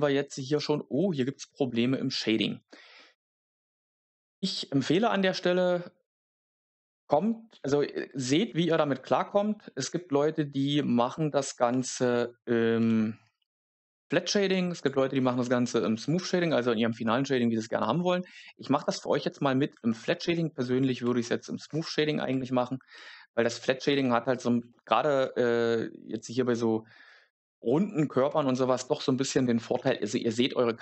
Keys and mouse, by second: 2.8 Tab, 3.7 a, 11.6 3, 12.7 w, 15.3 Tab, 15.7 middle click, 19.8 shift+middle click.